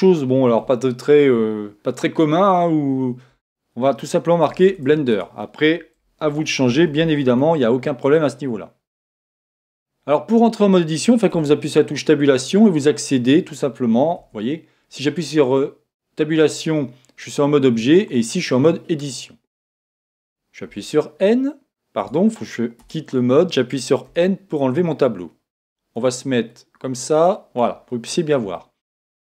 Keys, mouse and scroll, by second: 3.3 Tab, 4.4 BackSpace, 4.6 BackSpace, 4.8 BackSpace, 5.1 BackSpace, 6.2-7.3 typing, 9.3 Tab, 9.7-14.5 middle drag, 10.9 Tab, 11.3 Tab, 14.5 Tab, 17.7 Tab, 20.7 n, 22.0 BackSpace, 22.8 Tab, 24.1 n, 25.7-28.3 drag, 28.5-29.2 middle drag.